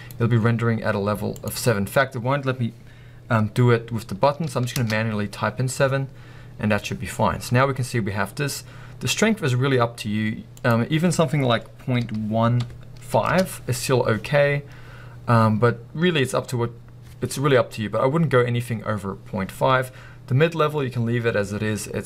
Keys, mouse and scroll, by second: 13.5 Return.